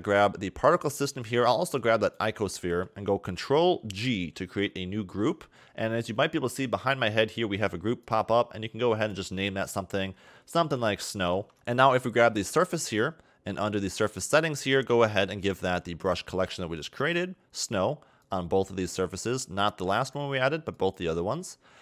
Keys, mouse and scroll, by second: 0.4-1.7 scroll down 1, 2.0 shift+click, 4.4 ctrl+g, 8.0 click, 9.0 click, 11.5 scroll up 4, 11.7 click, 13.1-13.6 scroll down 5, 14.2 click, 14.5-15.3 scroll down 7, 16.1 click, 18.3 click, 19.9 click.